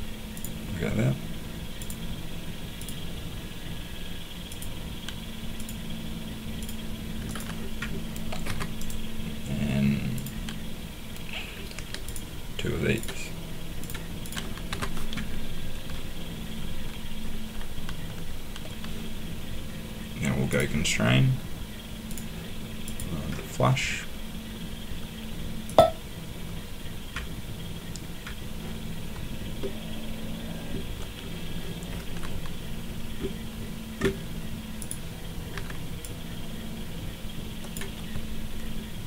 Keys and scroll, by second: 8.5 Escape, 14.7 Escape, 35.5 Escape.